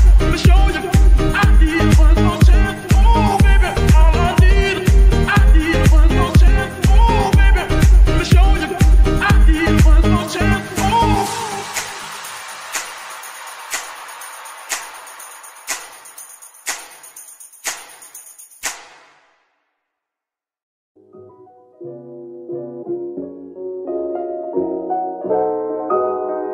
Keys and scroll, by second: 0.3 Escape, 0.9 Tab, 6.0 ctrl+Tab, 7.7 g, 8.8 Escape, 9.5 r, 10.6 Escape, 20.9 z.